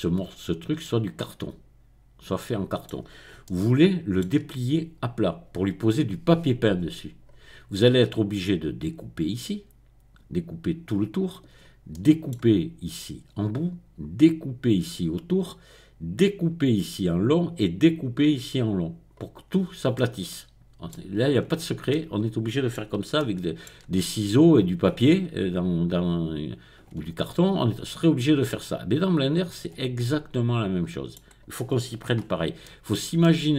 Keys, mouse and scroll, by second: 0.8-4.4 middle drag, 6.7-7.2 scroll up 2, 7.2-8.0 scroll down 2, 11.5-11.9 scroll up 1, 11.9-15.9 middle drag, 19.3-19.9 scroll down 1, 19.9-21.4 middle drag, 21.4-21.9 scroll up 1, 21.9-23.9 middle drag, 23.9-24.7 scroll down 1, 27.8-28.4 scroll up 1, 28.4-31.3 middle drag, 32.1-32.6 scroll up 1, 32.6-33.5 shift+middle drag.